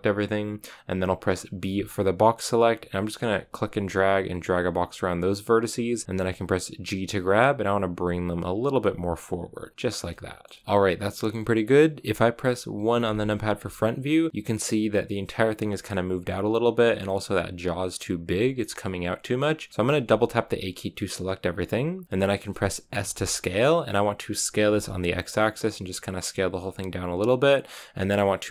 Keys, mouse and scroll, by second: 7.0 g, 10.0 shift+middle click, 10.6 z, 12.9 KP_1, 19.8 a, 19.9 a, 23.0 s.